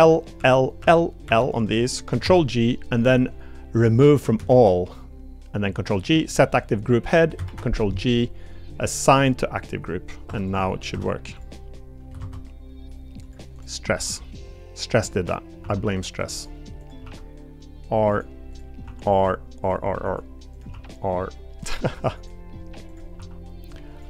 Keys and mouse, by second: 0.4 l, 2.2 ctrl+g, 4.5 ctrl+g, 10.3 Tab, 10.5 click, 10.9 Tab, 11.3 click, 12.2 ctrl+Tab, 13.5 click, 13.9 r, 15.3 middle click, 15.6 r, 18.8 r, 20.7 r, 23.7-24.0 drag.